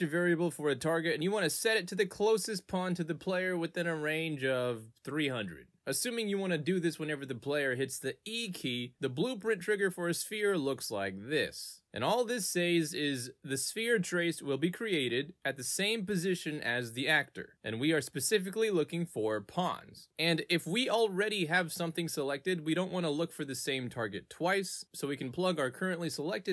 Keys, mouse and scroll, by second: 0.4 click, 0.6-5.3 typing, 5.6 click, 7.1 click, 9.6 click, 13.8 click, 15.3 click, 19.2 click, 20.2 click, 21.0 click, 24.6 click, 25.1 click, 25.6 click.